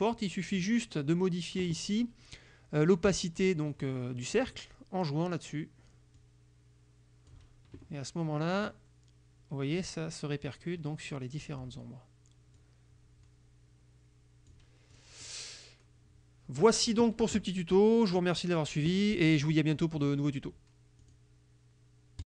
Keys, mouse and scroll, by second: 0.3 click, 0.6-4.4 middle drag, 6.3-7.6 drag, 8.7-10.0 drag, 12.6-13.6 drag.